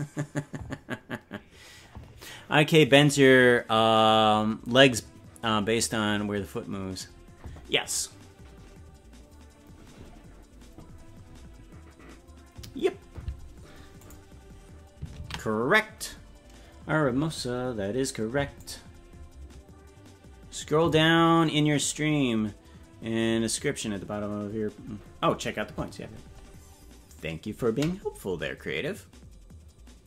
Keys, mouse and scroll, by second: 14.0 click, 17.9 ctrl+s, 18.6 click.